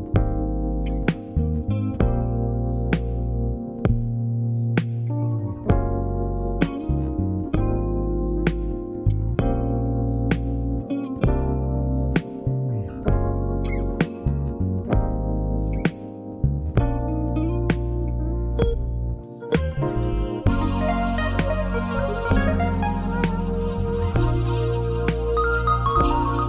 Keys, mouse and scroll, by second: 4.1-10.4 shift+middle drag, 4.9 s, 10.4 click, 11.8 shift+middle click, 12.4-22.1 drag, 22.1-24.6 shift+middle drag, 22.4-23.4 scroll up 2, 23.4-24.2 scroll up 1.